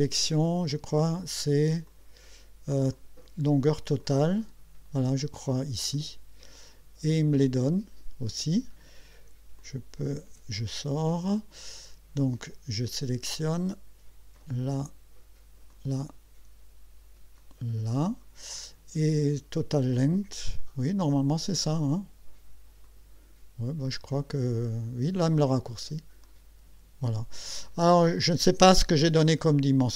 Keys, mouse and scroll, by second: 0.6 click, 1.9 click, 2.9 click, 4.0 click, 5.9 click, 9.2 Escape, 9.6 click, 10.1 Escape, 14.3 click, 15.7 click, 17.4 click, 20.6 click, 22.8 click, 26.2 click.